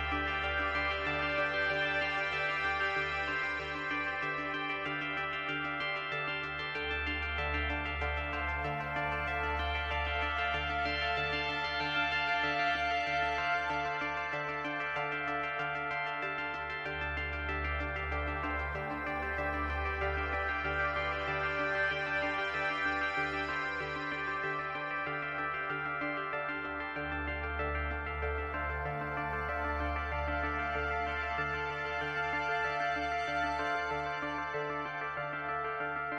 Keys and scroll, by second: 4.4 space, 5.4 space, 21.9 Delete, 28.5 space, 29.8 space.